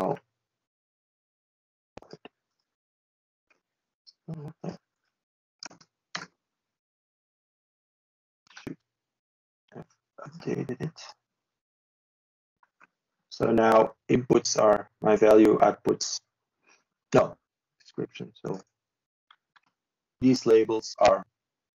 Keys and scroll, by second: 0.7 Delete, 4.9 ctrl+space, 5.5 ctrl+x.